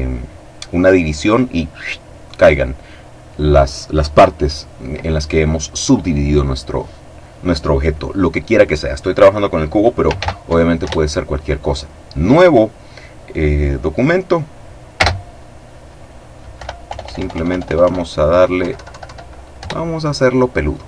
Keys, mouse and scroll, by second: 9.6 ctrl+n, 10.3 ctrl+Return, 14.5 space, 16.1 End, 16.3 BackSpace, 18.1 Down, 19.1 Return.